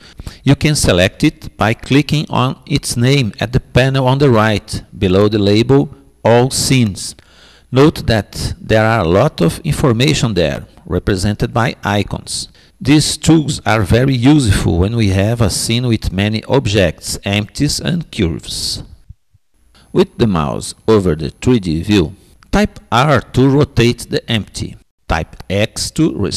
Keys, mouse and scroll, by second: 1.3-3.3 drag, 22.7 r.